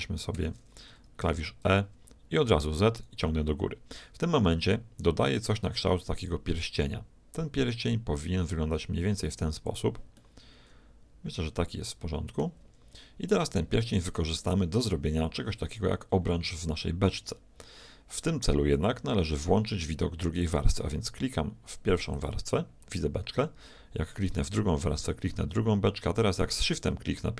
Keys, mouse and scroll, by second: 1.2 e, 10.2-12.2 middle drag, 12.7 Tab, 14.9 z, 16.1-18.9 middle drag, 22.1-23.9 drag, 24.3-26.1 drag.